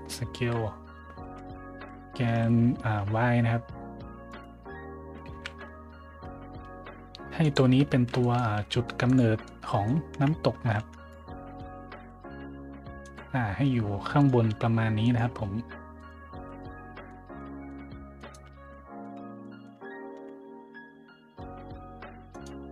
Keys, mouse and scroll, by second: 0.3 z, 1.2 x, 2.3 y, 4.2 right click, 5.3 s, 5.7 y, 7.3 click, 8.1 shift+middle drag, 8.5 g, 9.0 click, 9.3-9.8 middle drag, 10.1-12.5 typing, 12.9 click, 13.5 g, 14.1 click, 14.4 s, 15.0 click, 15.2 g, 15.9 click, 16.2 a, 16.5-17.0 middle drag, 17.3-17.6 middle drag, 18.1 right click, 18.4 z, 18.6-18.9 middle drag, 18.6-18.9 scroll up 1, 19.1 z, 19.4 middle drag, 19.4 scroll up 1, 20.1 `, 22.2 right click.